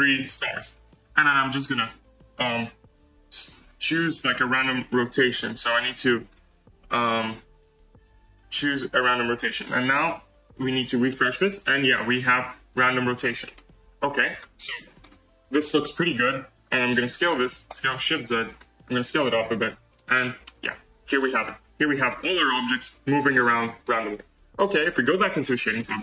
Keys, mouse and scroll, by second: 7.8-9.0 drag, 10.5 drag, 10.6 space, 11.0-13.7 middle drag, 13.7 space, 14.3 click, 14.9-15.6 scroll down 2, 15.6 click, 17.7 s, 19.9 click, 20.0 space, 20.3-21.5 middle drag, 21.5 scroll up 1, 21.5 space, 21.9-23.8 middle drag, 23.8-24.5 scroll down 2, 24.5 click, 25.0-25.6 scroll down 4, 25.7-26.0 shift+middle drag.